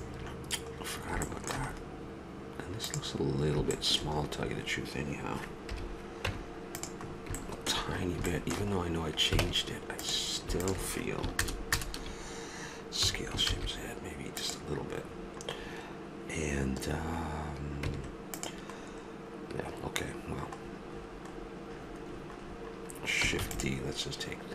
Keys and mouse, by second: 0.7 middle click, 2.8 right click, 3.7-5.7 middle drag, 5.7 KP_Decimal, 6.2 Tab, 9.4 ctrl+Tab, 11.4 ctrl+KP_Add, 12.4 ctrl+KP_Add, 13.0 s, 15.2-16.4 middle drag, 17.9 Tab, 21.7-23.3 middle drag, 23.4 shift+d.